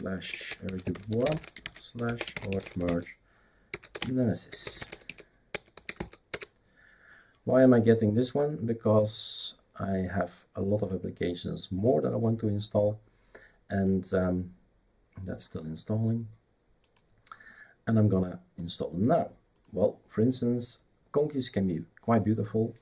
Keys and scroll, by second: 0.0-6.4 typing.